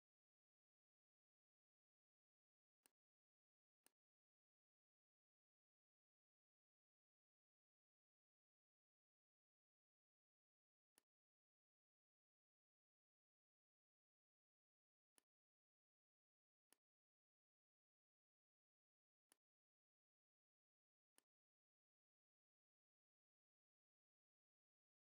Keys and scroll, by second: 14.6 v, 20.4 z, 20.9 space, 22.7 shift+m.